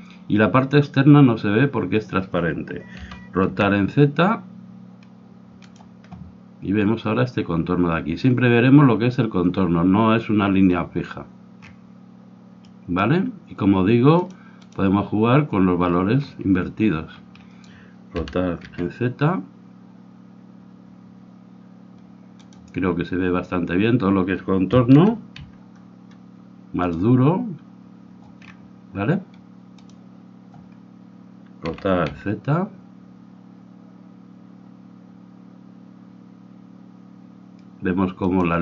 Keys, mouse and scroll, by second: 3.1 r, 11.7-12.7 scroll up 1, 12.7-14.2 middle drag, 14.2-17.2 drag, 17.2-18.3 scroll up 1, 18.3-18.9 scroll up 1, 18.3 r, 18.9-20.8 scroll up 1, 24.9 r, 28.4-29.7 middle drag, 29.7-31.6 drag, 31.7 r.